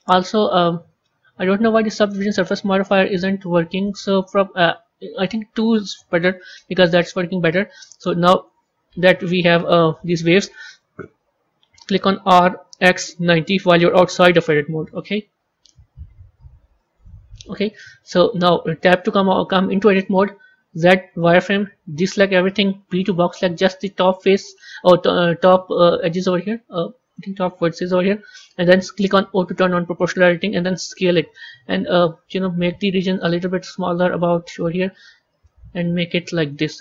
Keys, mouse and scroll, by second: 2.7-6.7 drag, 12.1 r, 16.2 Tab, 16.9 Tab, 18.7 Tab, 20.6 z, 22.0 a, 22.8 b, 27.0 click, 29.3 o, 30.7 s.